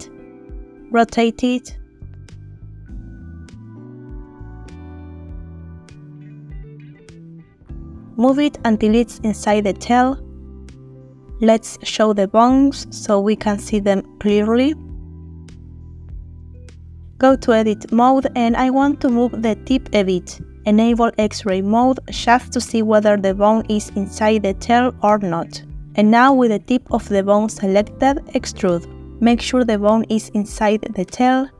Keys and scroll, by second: 0.8 r, 5.9 r, 8.4 g, 9.8 r, 16.2 g, 18.3 g, 26.2 e, 29.4 r.